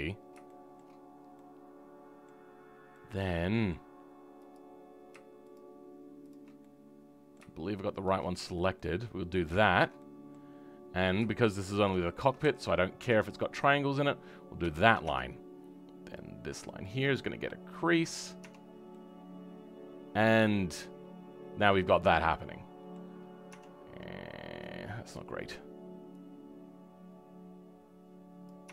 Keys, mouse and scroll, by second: 1.0-1.3 scroll down 2, 1.3-4.5 middle drag, 4.5 click, 6.6-8.0 middle drag, 8.0 shift+click, 8.7-11.0 middle drag, 11.0 click, 12.4 f, 12.7-13.0 scroll down 2, 13.0 Tab, 13.2-14.2 middle drag, 14.2-14.6 scroll up 2, 14.6 shift+middle click, 15.0 Tab, 16.8 Left, 17.8 Left, 17.8 click, 18.4 Tab, 18.6-18.9 scroll down 3, 18.9-22.2 middle drag, 23.1-23.5 scroll up 3, 23.5 Tab, 23.8 scroll up 2, 25.1 click, 26.2-28.7 drag.